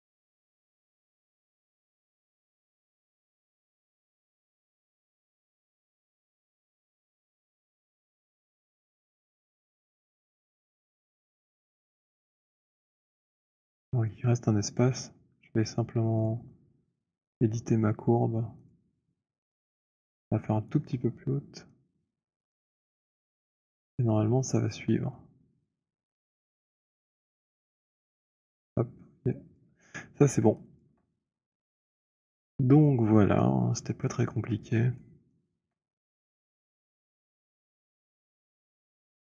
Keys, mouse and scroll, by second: 1.2 click, 2.7 alt+click, 4.5 click, 6.5 click, 6.5 z, 8.9 alt+click, 9.8 alt+right click, 10.4 alt+middle click, 10.4 alt+scroll, 10.9-12.3 alt+scroll, 11.3 alt+middle click, 12.9 alt+middle click, 13.2 alt+middle click, 13.6 alt+click, 16.1 click, 18.6 click, 20.6 right click, 22.1 click, 24.0 click, 26.1 click, 29.5 click, 30.0-30.3 scroll, 30.9 alt+click, 31.6 scroll, 32.0 middle click, 32.6 middle click, 33.3 alt+click, 34.3-35.0 alt+scroll, 35.0 alt+click, 35.4 alt+middle click, 35.8 alt+right click, 35.8 w, 37.1 right click, 38.0 click.